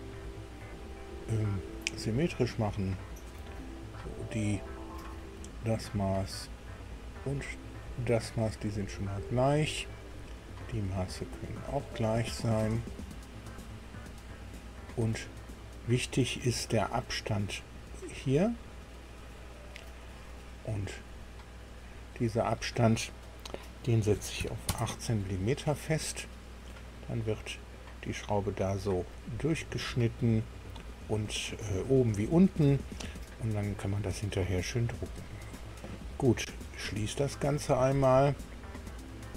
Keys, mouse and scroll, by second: 0.5 click, 2.1 click, 4.3 click, 6.5 click, 7.7 click, 9.0 click, 10.4 click, 11.6 click, 13.6 click, 17.5 click, 19.1 click, 21.7 click, 24.1 KP_1, 24.4 KP_8, 24.6 KP_Enter, 26.5-29.2 middle drag, 29.5 scroll down 1, 37.6 click.